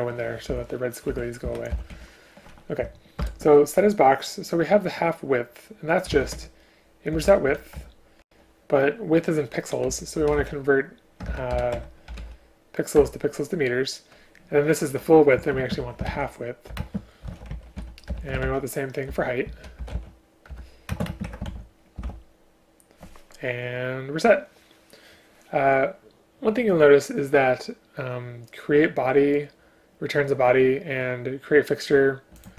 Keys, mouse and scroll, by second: 0.6 Escape, 1.2 Escape, 1.6 Up, 1.8 End, 2.0 Left, 3.3 ctrl+p, 7.9 Return, 11.3 BackSpace, 11.5 BackSpace, 13.0 Return, 15.4 space, 15.6 space, 18.1 BackSpace, 19.1 Return, 20.5 Return, 20.9 space, 21.1 space.